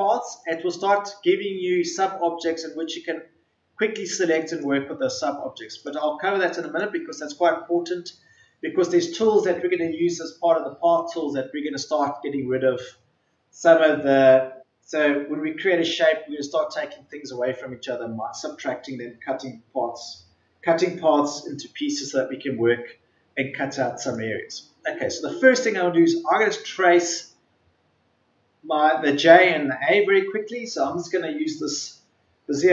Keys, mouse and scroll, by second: 0.4 shift+click, 2.7 Delete, 4.4 click.